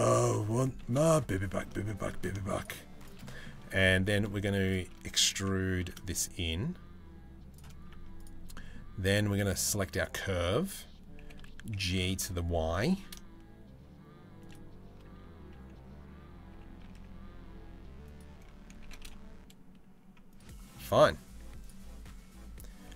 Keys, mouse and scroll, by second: 0.4 3, 0.6 click, 0.9 middle click, 1.5 shift+middle click, 1.9 shift+middle click, 2.8 middle click, 3.4 middle click, 5.4 e, 7.6 Tab, 8.1 middle click, 10.8 g, 16.1 g, 18.4 g, 20.6 middle click, 22.5 g.